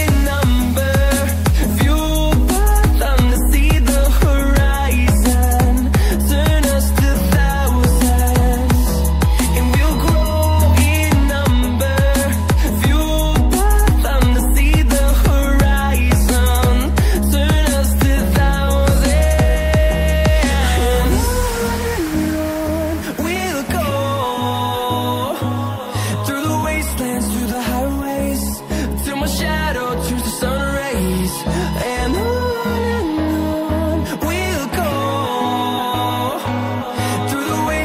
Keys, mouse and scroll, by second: 0.3 scroll down 1, 1.0 click, 1.2 ctrl+c, 1.4 ctrl+v, 4.2 scroll up 1, 4.5 click, 9.1 double click, 10.1 click, 10.3 scroll down 1, 11.1 click, 11.8 ctrl+v, 12.8 click, 13.7 scroll up 1, 14.7 click, 16.6 double click, 18.3 scroll down 1, 20.0 scroll up 1, 20.4-20.9 scroll down 1, 20.9 scroll up 1, 23.1 scroll down 1, 25.5 click, 26.8 click, 27.2 scroll up 1, 27.6 ctrl+click, 28.5 scroll down 1, 29.1 click, 33.1 scroll up 1, 35.7 click.